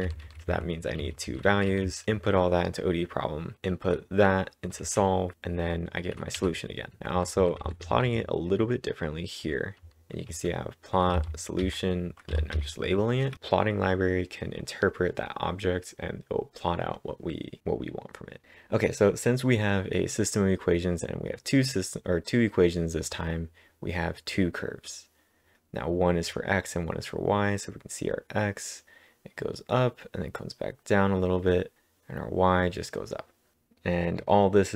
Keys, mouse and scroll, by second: 4.8 typing, 6.4-7.5 typing, 12.4-13.8 typing, 18.4-21.2 drag.